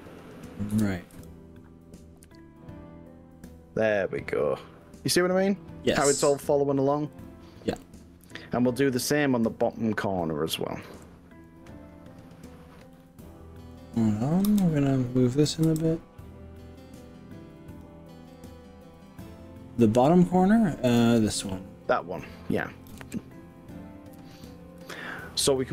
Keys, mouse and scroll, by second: 0.7 KP_1, 1.3 g, 7.3 click, 7.8 middle click, 8.7 click, 9.7 click, 10.9 g, 13.1 right click, 14.5 KP_3, 15.7 g, 17.9 click, 18.4-20.2 middle drag, 20.9 click, 21.3 middle click, 21.9 click, 22.5 middle click, 23.0 KP_3, 24.9 g.